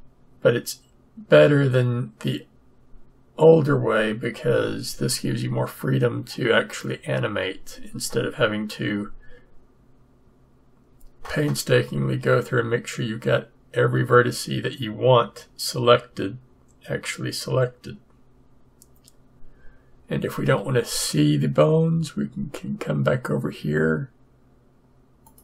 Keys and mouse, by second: 25.2-25.4 drag.